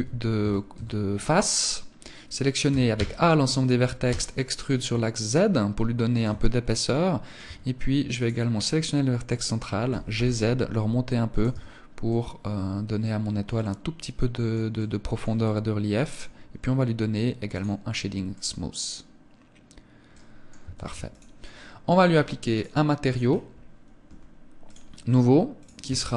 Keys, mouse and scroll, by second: 2.1 a, 2.3 a, 3.5 e, 5.6 click, 5.7 Tab, 6.1 middle click, 6.9 Tab, 7.5 right click, 10.8 click, 11.5 middle click, 13.0 middle click, 14.8 middle click, 16.9 click, 17.7 middle click, 20.1 ctrl+s, 21.9 click, 22.4-23.5 scroll up 6, 23.5 scroll up 2, 24.0 click, 25.0 click.